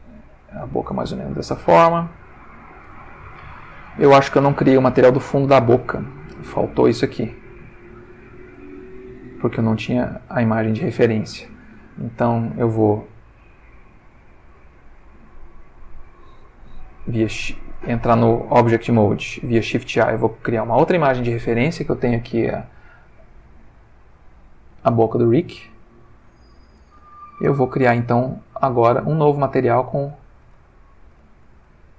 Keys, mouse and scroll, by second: 1.6 click, 2.8 Tab, 6.2-7.7 ctrl+middle drag, 8.0-8.7 ctrl+shift+middle drag, 8.8-10.2 ctrl+shift+middle drag, 12.2 shift+middle click, 14.8-16.2 shift+middle drag, 17.1 shift+a, 17.9 ctrl+shift+Tab, 19.0 click, 19.6 shift+a, 20.7 click, 22.5 click, 23.7 click, 24.4 g, 25.5 click, 26.2 g, 26.7 click, 27.1 ctrl+middle click, 28.9 click, 30.7-31.9 ctrl+middle drag.